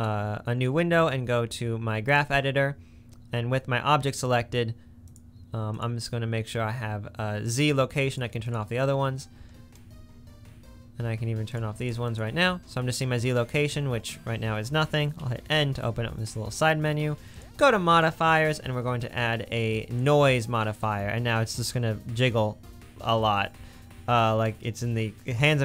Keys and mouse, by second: 3.5-5.2 drag, 5.7 click, 7.4 click, 8.1 click, 8.4 click, 11.5-12.2 drag, 15.2 n, 17.3 click, 18.5-21.1 drag, 20.9 space, 22.3 space, 23.3 space.